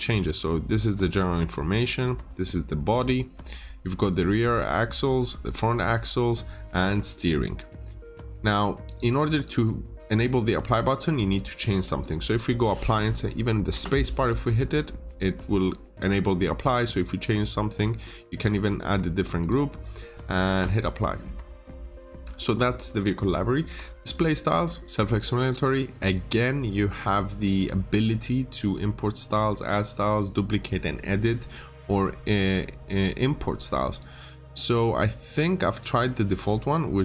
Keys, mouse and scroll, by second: 9.0 double click, 10.7 click, 10.9 double click, 11.8 click, 13.7 space, 17.2 click, 36.2-37.0 scroll down 1.